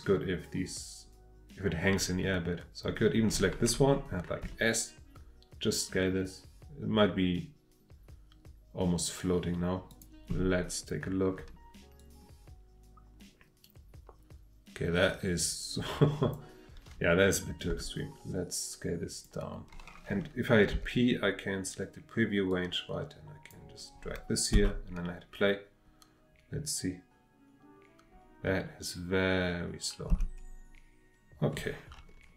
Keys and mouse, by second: 4.4 s, 9.9 click, 12.0-16.3 drag, 17.7 s, 19.1 drag, 20.7 p, 24.5 space, 30.1 space.